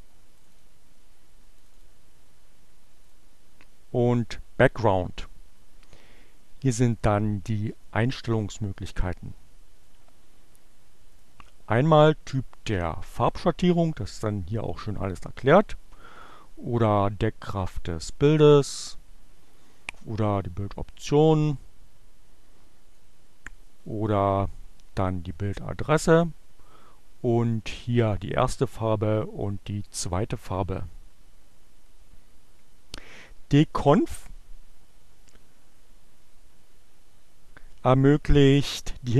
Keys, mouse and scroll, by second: 0.3 click, 1.6 click, 3.2 click, 3.8 click, 6.7 click, 8.6-10.2 drag, 11.1 click, 16.2 click, 18.7 click, 23.1-23.8 drag, 23.9 click, 24.6 click, 28.8 click.